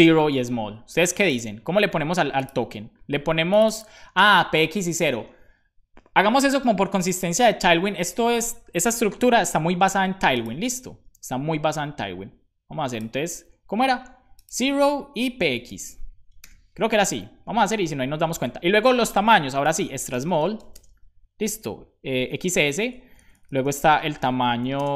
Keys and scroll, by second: 16.1-17.0 typing, 17.0 Up, 17.3 Down, 17.5 Down, 18.0 super+Right, 20.2 BackSpace, 22.3 s, 22.6 Down, 22.9 Left, 23.2 Left, 23.3 Left, 23.4 Left, 23.6 Left, 24.7 shift+space.